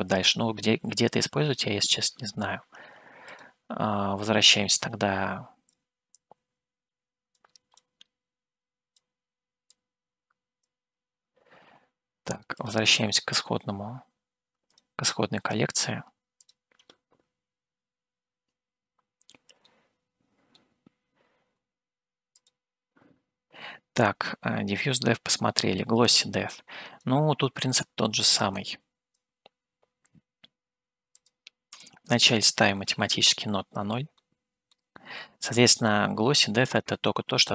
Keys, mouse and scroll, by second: 3.6 click, 4.3 scroll down 2, 5.0-5.7 scroll down 1, 5.7 click, 5.7 scroll down 1, 6.2 click, 7.3 click, 7.9-8.9 drag, 9.7 click, 10.7 click, 12.7 click, 14.8 click, 16.4 click, 18.1 Home, 18.7-19.6 scroll up 3, 19.6 middle click, 22.3 click, 26.0-27.2 drag, 28.6 click, 31.2-32.9 drag, 34.2 shift+middle click, 35.2 scroll up 1, 35.6-37.0 middle drag.